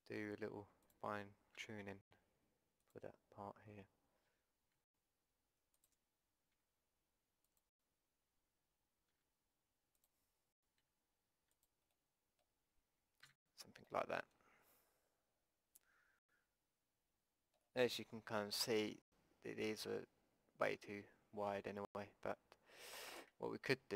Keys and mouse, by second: 0.7 click, 1.6 e, 3.2 click, 4.8 s, 6.6 e, 9.1 e, 10.8 s, 11.9 click, 13.3 a, 22.9-23.9 drag.